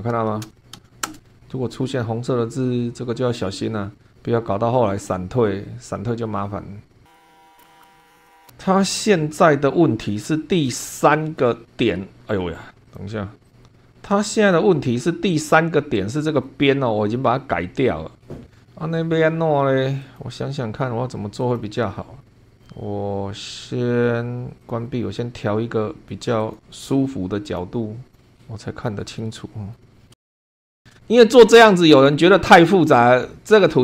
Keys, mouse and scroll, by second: 0.4 Return, 7.4 middle click, 7.4 scroll down 2, 7.7 click, 7.8 right click, 7.9 click, 8.4-10.7 scroll up 1, 10.9 shift+middle click, 12.8 click, 13.5 right click, 14.4 click, 20.0 click, 21.4 click, 22.2 scroll down 1, 24.6 click, 26.4 click, 27.5 click, 28.1 click, 28.4 click, 29.1 middle click, 29.8 scroll up 1, 30.1 shift+middle click, 30.5 click, 30.7 scroll down 2, 30.9 shift+middle click.